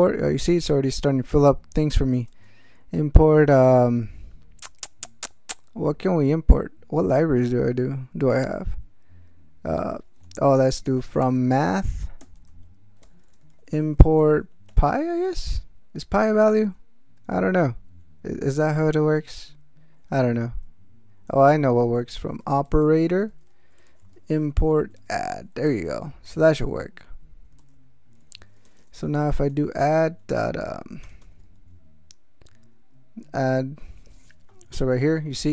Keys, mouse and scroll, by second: 0.5 Return, 2.1 space, 10.2 alt+BackSpace, 10.8 alt+f, 11.0 alt+r, 11.1 alt+o, 11.2 alt+m, 11.6 alt+space, 12.2-15.2 typing, 21.3 alt+BackSpace, 22.2 alt+o, 22.3 alt+p, 22.4 alt+e, 22.5 alt+r, 22.6 alt+a, 22.8 alt+t, 22.9 alt+o, 23.0 alt+r, 23.3 alt+space, 23.6-25.5 typing, 25.7 ctrl+x, 25.8 ctrl+s, 27.6 alt+m, 28.3 ctrl+e, 28.6 ctrl+Return, 29.1 ctrl+a, 29.3 ctrl+d, 29.8 ctrl+., 31.0 BackSpace, 31.2 shift+9.